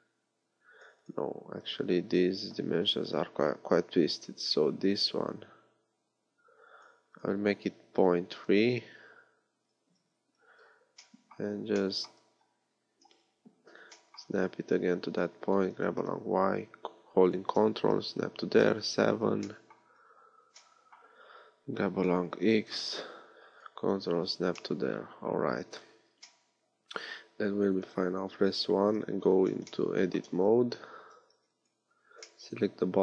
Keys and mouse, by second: 10.2 Tab, 12.2 Tab, 13.0 KP_3, 15.6 g, 18.6 KP_7, 22.1 g, 28.6 KP_1, 29.2 Tab, 30.3 a, 31.0 a, 31.3 b.